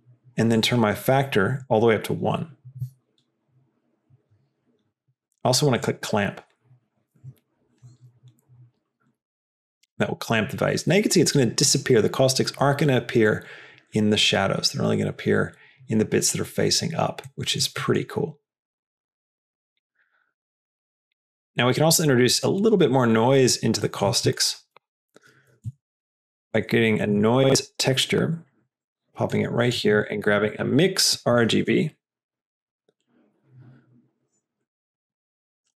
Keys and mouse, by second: 0.6-3.3 drag, 17.2 middle click, 17.8 middle click, 18.3 click, 18.9 middle click, 19.3 click, 20.1 middle click, 20.8 click, 21.4 middle click, 22.0 click, 22.5 click, 23.7 middle click, 24.2 shift+a, 29.8 click, 30.0 shift+a.